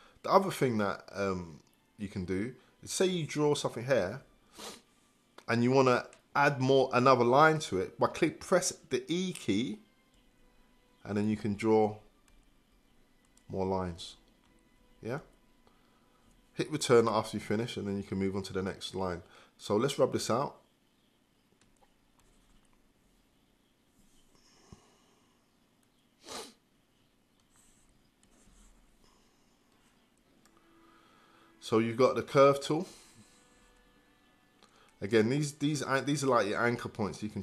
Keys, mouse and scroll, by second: 3.1 click, 17.0 Return, 22.2-37.4 drag.